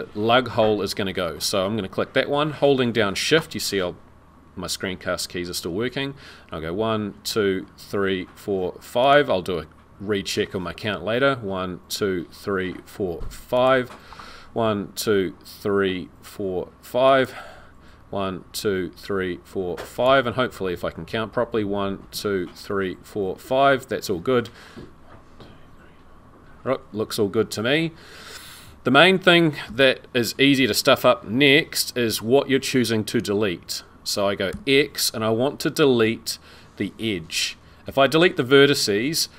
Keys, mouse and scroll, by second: 9.0 shift+click, 13.6 shift+click, 20.0 shift+click, 29.6 z, 34.6 x.